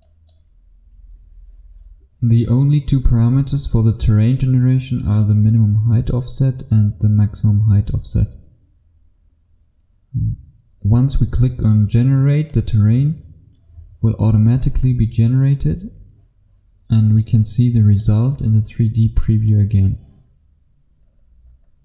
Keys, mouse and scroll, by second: 0.1 click, 20.6-21.8 scroll down 1.